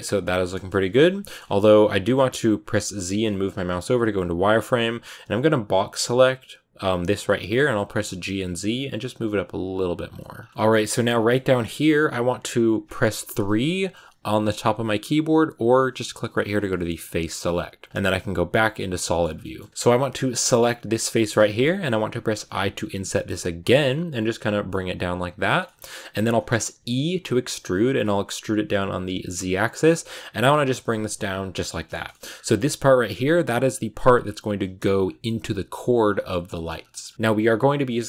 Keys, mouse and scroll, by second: 0.4 KP_1, 1.1 shift+middle click, 1.2-3.2 scroll up 3, 3.7 z, 7.0 b, 7.8 g, 10.3 scroll up 3, 10.5 shift+middle click, 10.9 scroll up 1, 11.0-13.3 middle drag, 13.3 3, 16.9-18.0 drag, 18.0 z, 18.5 scroll down 1, 18.6 middle click, 19.5-20.3 scroll up 1, 20.3 right click, 21.0 shift+middle click, 21.2-22.1 scroll up 1, 22.2 i, 25.5-26.6 shift+middle drag, 26.6 e, 31.4 scroll down 6, 31.5 middle click, 32.1 scroll up 7, 32.3-35.9 middle drag, 35.9-36.4 scroll down 2, 36.4 shift+middle click, 36.7 scroll down 1, 36.8 middle click, 37.1-38.0 scroll up 2.